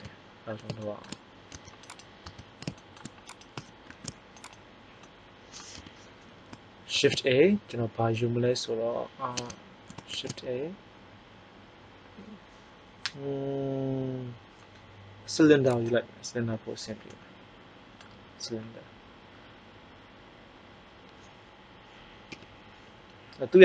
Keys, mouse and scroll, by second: 1.5 Tab, 1.8 right click, 2.2 Tab, 3.9 shift+s, 5.7 KP_1, 6.9 shift+a, 9.2 Tab, 10.1 shift+a, 22.2 KP_3.